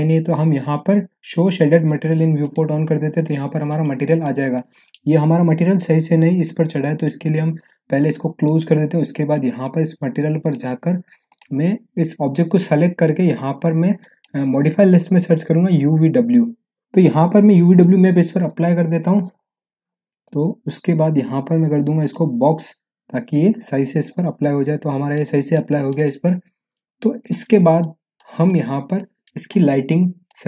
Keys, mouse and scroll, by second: 2.4-3.4 middle drag, 3.4 scroll down 1, 3.7-4.3 middle click, 4.5-6.4 scroll up 1, 8.3 click, 9.2 scroll down 1, 9.3 middle click, 10.4 click, 14.0 click, 15.6 u, 17.6 u, 18.2 click, 19.6 scroll down 1, 23.0-23.6 scroll down 1, 24.0-25.2 alt+middle drag, 25.3-26.0 scroll down 2, 25.5-27.6 middle click, 26.0-27.8 middle drag, 27.8-28.4 alt+middle click, 28.4-28.8 alt+scroll up 1, 28.8-29.4 alt+middle click, 29.5 click, 30.0 scroll down 1, 30.2-30.4 alt+middle drag.